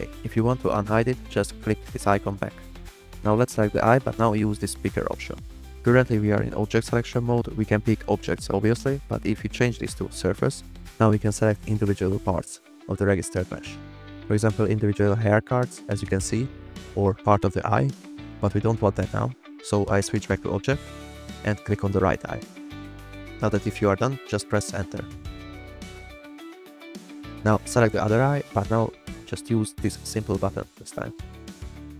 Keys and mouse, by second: 1.2 click, 1.8 click, 3.5 middle click, 4.6 click, 5.5-6.1 drag, 14.0 s, 19.7 o, 22.3 click, 25.2 Return, 29.6 drag, 30.1 shift+middle click, 30.6 drag.